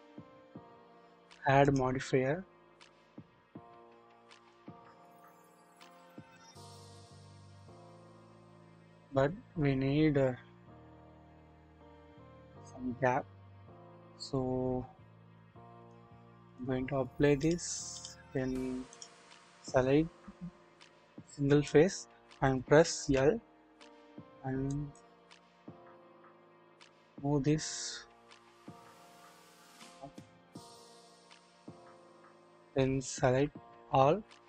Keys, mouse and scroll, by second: 0.7 typing, 4.4 click, 6.8-9.1 drag, 12.2-12.9 scroll up 1, 12.9-13.5 scroll down 1, 13.5-14.3 scroll down 1, 15.9-16.6 drag, 17.4-18.0 drag, 18.9 click, 21.3 click, 23.0 typing, 23.9-24.6 scroll up 1, 24.6 typing, 24.7 click, 26.8 click, 27.2-32.3 drag, 33.3 a.